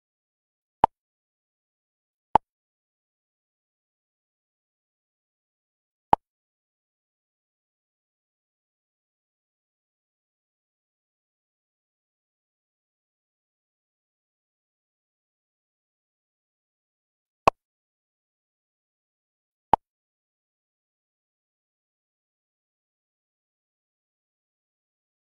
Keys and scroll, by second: 11.6 ctrl+j.